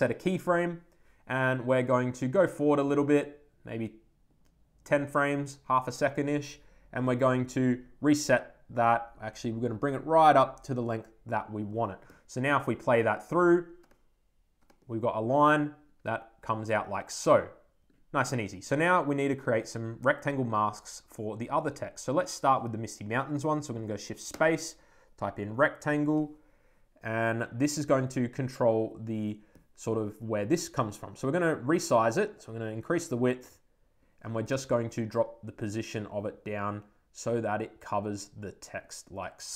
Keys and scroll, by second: 25.9 Return.